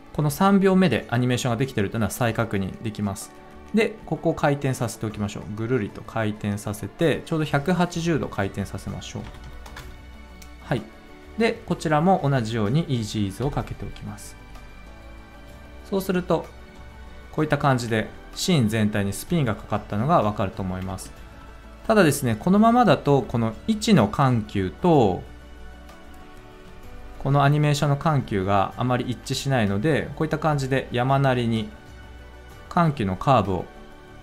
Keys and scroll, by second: 9.2 1, 9.6 0, 9.7 Return, 13.3 F9, 17.9 space, 20.8 space.